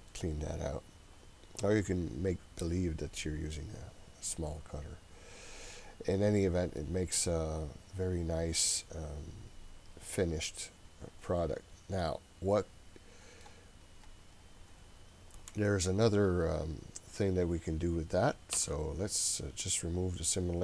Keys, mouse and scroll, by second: 3.2-3.9 scroll down 3, 3.9-5.2 scroll up 2, 5.2-5.6 scroll down 1, 5.6-6.8 scroll up 1, 6.8-13.5 middle drag, 13.5-14.1 scroll up 1, 14.1 click, 19.1 Delete, 19.9-20.6 scroll down 3.